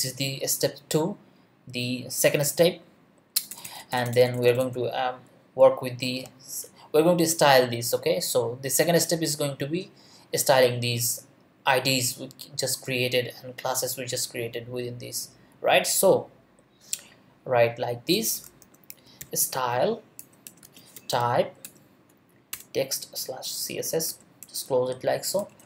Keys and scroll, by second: 3.4 Return, 5.5 Up, 18.4-21.6 typing, 20.6 Return, 21.6 Return, 24.1 shift+., 25.4 Return.